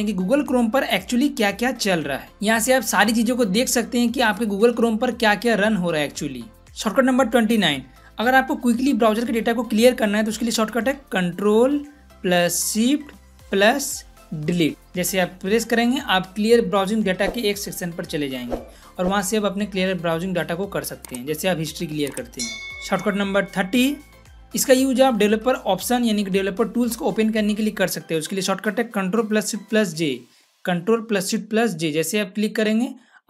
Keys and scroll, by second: 14.7 ctrl+shift+Delete, 31.6 ctrl+shift+j.